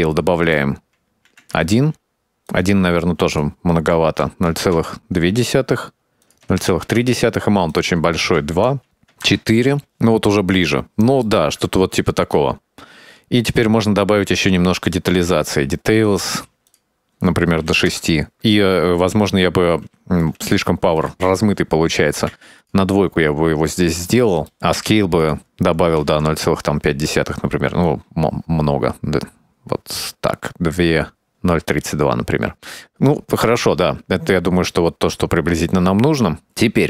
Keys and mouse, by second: 0.5-2.0 drag, 3.0-5.5 drag, 6.4-7.6 drag, 7.8 click, 8.5-10.2 drag, 11.5-14.8 middle drag, 15.4-16.7 middle drag, 17.1-18.1 drag, 19.0-19.9 middle drag, 20.1 middle click, 21.2-23.2 drag, 23.4 middle click, 23.9 middle click, 24.8 middle click, 25.4-27.3 drag, 28.0-31.8 shift+drag, 32.0 click, 32.3-33.2 middle drag, 34.3-36.1 middle drag, 36.4 middle click.